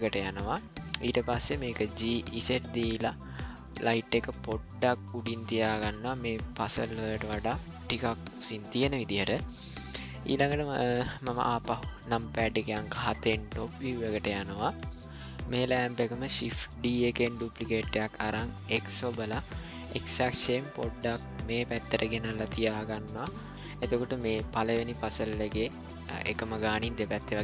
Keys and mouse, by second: 1.9 g, 7.7 g, 10.3-10.8 ctrl+middle drag, 12.5 KP_7, 13.9 middle click, 14.9 middle click, 16.9 shift+d.